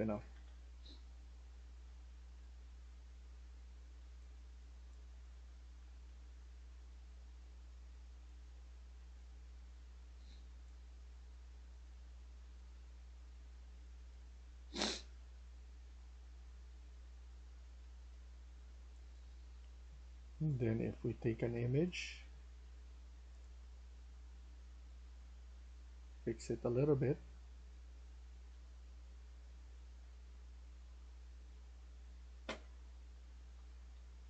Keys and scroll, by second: 0.0-3.2 typing, 5.2-10.5 typing, 12.0 typing, 14.2-15.1 typing, 16.1-18.4 typing, 25.7-28.5 typing, 29.8 e, 31.0-33.8 typing.